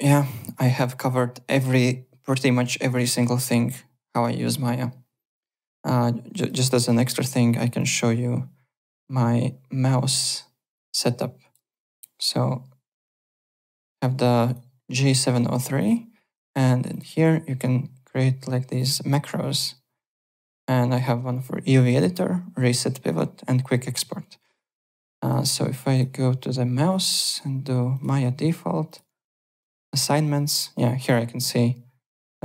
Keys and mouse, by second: 0.1 alt+Tab, 0.7 click, 1.5 click, 6.3 click, 7.8 click, 10.7 click, 12.9 click, 14.4 click, 15.8 click, 16.9 click, 18.8 click, 25.2 click, 25.9 click, 27.3 click, 27.9 click, 28.9 click, 31.0 click.